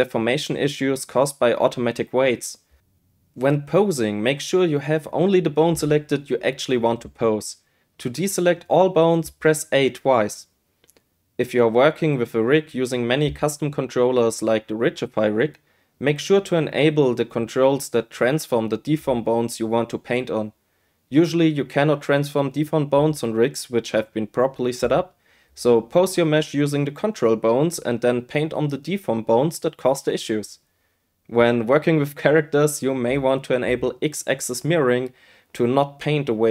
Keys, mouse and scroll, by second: 0.2 shift+middle click, 0.5 ctrl+middle click, 0.8 click, 1.6 shift+click, 1.9 click, 2.3 ctrl+middle click, 2.6 click, 3.6 ctrl+middle click, 4.0 click, 4.5 ctrl+z, 4.7 click, 4.9 ctrl+middle click, 5.4 click, 5.7 middle click, 5.9 middle click, 6.3-7.5 drag, 8.1 middle click, 8.3 ctrl+middle click, 8.5 click, 8.8 ctrl+z, 8.9 click, 9.9 middle click, 10.2 click, 10.6 click, 10.8 click, 10.9 click, 11.1 click, 11.2 click, 11.6-12.5 drag, 14.8 click, 16.5 click, 17.3 g, 17.6 z, 20.1 click, 20.4 middle click, 20.6 click, 21.1 Tab, 21.2 click, 21.4 ctrl+click, 21.9 Tab, 22.2 shift+k, 22.5 Tab, 23.4 ,, 23.6 ., 24.1 q, 24.5 shift+click, 24.8 ctrl+z, 24.9 Tab, 25.1 click, 26.1 g, 26.6 click, 26.8 click, 26.9 click, 27.3-28.3 typing, 27.6 ctrl+z, 29.0 middle click, 29.9-33.4 middle drag, 33.6 click, 34.1 click, 34.3 shift+click, 35.0 click, 35.3 click, 35.9 g, 35.9 z.